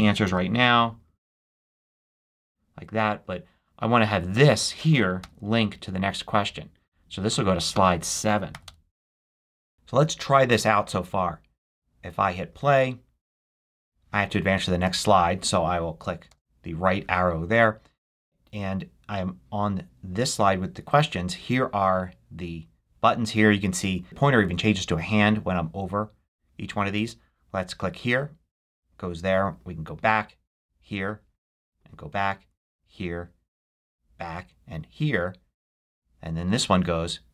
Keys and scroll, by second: 0.1 shift+super+c, 1.6 shift+super+a, 2.7 shift+d, 5.1 super+k, 8.4 7, 8.5 Return, 16.1 Right.